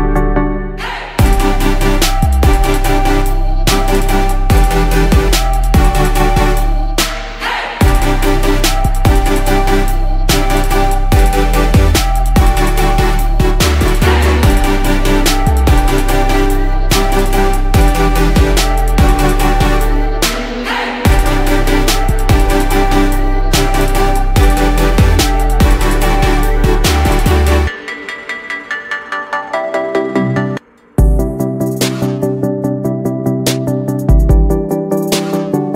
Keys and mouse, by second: 7.4 click, 9.1 click, 9.7 click, 26.1 click, 31.4 drag, 31.9 click.